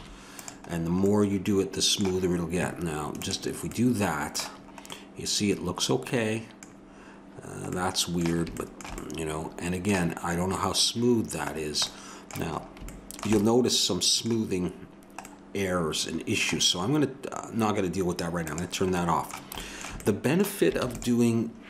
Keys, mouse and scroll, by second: 0.0 Tab, 1.0-3.1 middle drag, 3.1-5.1 drag, 11.5-15.5 middle drag, 18.4 click, 19.0-20.4 middle drag.